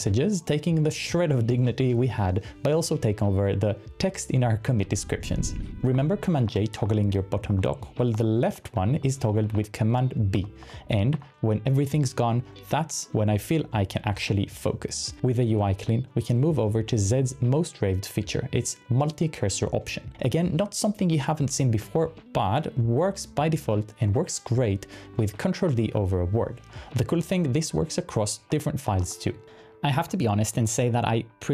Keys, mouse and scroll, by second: 5.7 super+n, 6.0 super+b, 6.6 super+b, 7.0 super+b, 7.6 super+w, 8.1 super+w, 8.5 super+w, 9.5 super+b, 10.4 super+b, 10.6 super+b, 19.8-20.6 typing, 25.7 super+d, 27.3-29.6 typing.